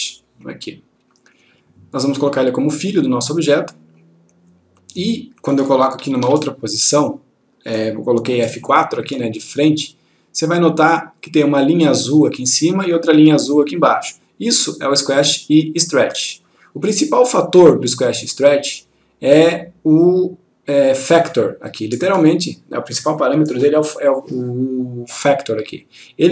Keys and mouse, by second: 2.7-3.9 click, 6.3 F4, 10.3-11.2 click.